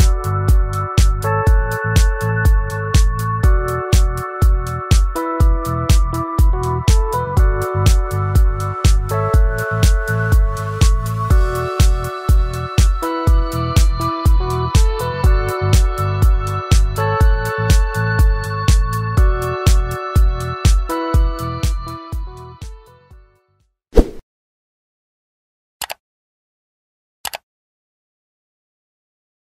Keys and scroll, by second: 20.4 ctrl+shift+j.